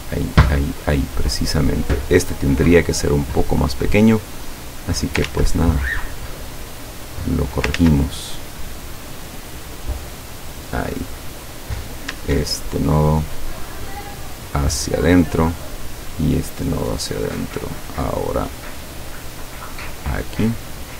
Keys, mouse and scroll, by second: 0.4 click, 1.8 click, 2.5 click, 3.3 click, 4.5 click, 5.4 ctrl+z, 6.4 click, 7.1 click, 7.8 ctrl+z, 8.2 ctrl+click, 8.9 click, 9.6 click, 10.0 click, 11.2 click, 14.1 click, 15.5 click, 16.0 click, 19.0-20.5 drag.